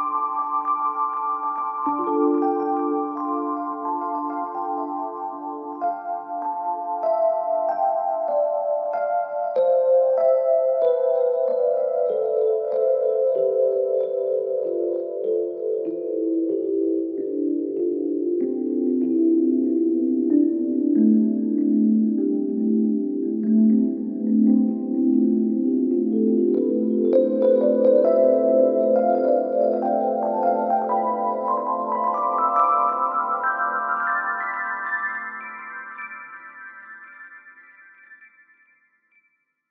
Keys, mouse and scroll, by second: 0.5-1.0 scroll down 2, 1.0 KP_1, 1.7 scroll up 2, 3.0 shift+d, 4.3 p, 5.1 Tab, 5.7 click, 6.2-7.2 scroll down 3, 7.2 click, 8.7 drag, 10.3 click, 11.2 click, 12.1-13.0 scroll up 2, 13.0 Tab, 13.3-14.2 scroll up 1, 14.2 KP_Divide, 15.3 1, 15.5-16.0 scroll up 1, 16.0-17.1 shift+middle drag, 17.1 click, 18.4 x, 19.8 Tab, 21.0-23.0 drag, 23.0 KP_Divide, 24.3-25.3 shift+middle drag, 25.3-29.1 right drag, 29.2 click, 29.6-31.1 scroll down 9, 31.1-38.2 drag, 38.2-38.9 scroll down 2, 38.9 Tab, 39.0-39.7 scroll up 2.